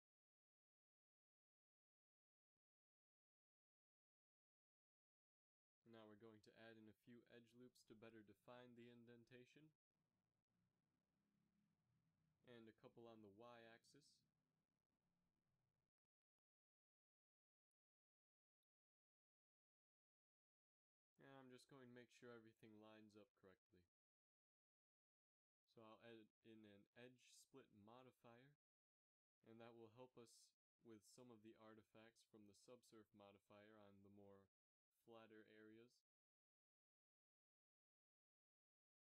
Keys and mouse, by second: 0.9 g, 4.7 z, 6.0 ctrl+r, 7.7 s, 11.4 ctrl+r, 13.6 s, 19.2 s, 22.8 KP_7, 23.5 z, 25.2 z, 26.4-28.3 drag, 29.3-32.3 middle drag, 30.4 a, 31.1 a, 32.3 space, 33.8 a.